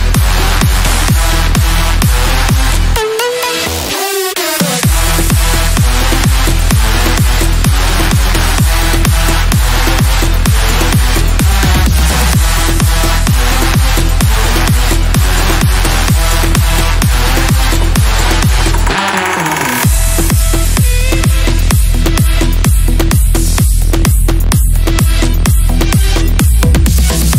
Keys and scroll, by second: 1.3 shift+F2, 13.6 F3, 17.8 Delete, 25.3 shift+F2.